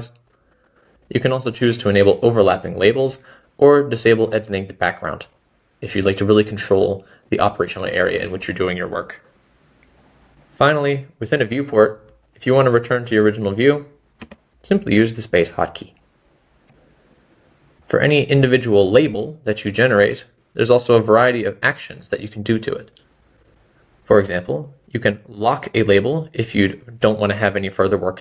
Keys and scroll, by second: 15.9 space, 20.8 typing.